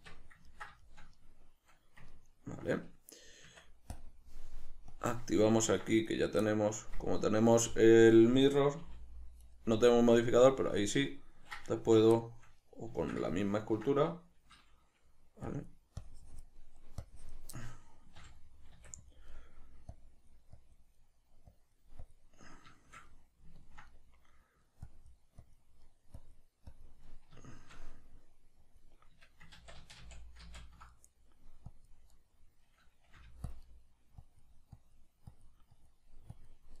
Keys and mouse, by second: 3.5 Tab, 4.9-5.4 drag, 5.4-6.1 ctrl+middle drag, 6.1 right click, 6.4-9.5 middle drag, 8.8 g, 9.5 right click, 10.9-15.5 ctrl+middle drag, 11.8 Tab, 15.5-16.6 drag, 16.6 middle click, 17.0 click, 17.5 middle click, 18.2 g, 19.0 click, 19.3 middle click, 19.9-20.9 drag, 20.9 middle click, 21.5 click, 22.4-24.8 middle drag, 24.8-25.8 drag, 25.8 middle click, 26.1 click, 27.0-28.6 middle drag, 28.6-30.9 drag, 29.6 ctrl+z, 30.9 middle click, 31.7 click, 32.1-33.5 middle drag, 33.2 f, 33.5 click, 33.6 middle click, 34.2-36.8 drag.